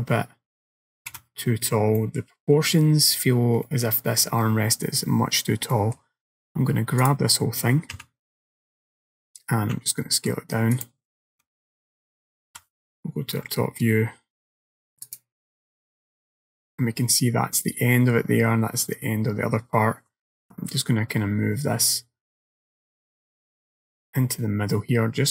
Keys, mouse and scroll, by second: 1.2 KP_1, 2.0 middle click, 3.2-3.9 scroll down 3, 3.7 middle click, 5.4-6.4 scroll up 3, 5.8 middle click, 7.1 click, 8.0 a, 9.8 s, 11.4 KP_1, 12.6 KP_7, 15.1 click, 15.8 scroll up 2, 16.0 scroll down 1, 16.3 scroll up 2, 20.4 g.